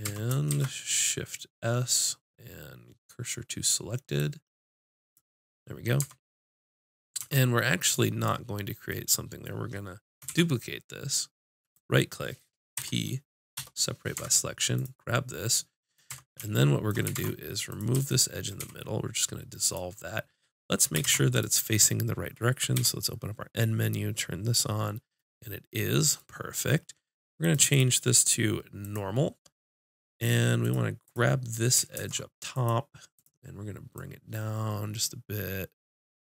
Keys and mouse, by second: 0.0 Tab, 0.5 shift+s, 6.0 Tab, 7.2 Tab, 10.3 shift+d, 11.7-12.7 drag, 12.7 p, 14.1 Tab, 14.8 click, 15.6 click, 16.1 Tab, 17.1 ctrl+Tab, 18.1 click, 18.6 x, 21.0 ctrl+Tab, 21.5-23.3 drag, 22.7 n, 30.6-31.9 drag, 31.9 ctrl+Tab, 33.1-35.1 drag.